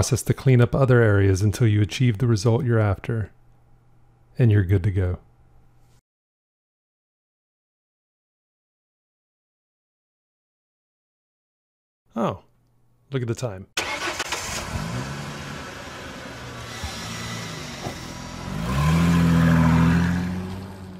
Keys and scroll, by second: 1.1 shift+i, 2.7 shift+x, 7.5 shift+x.